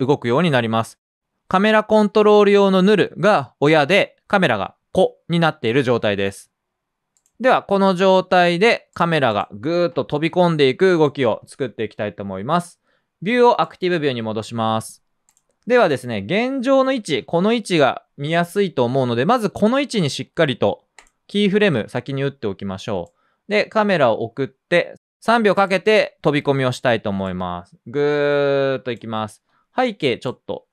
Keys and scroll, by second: 17.1 p.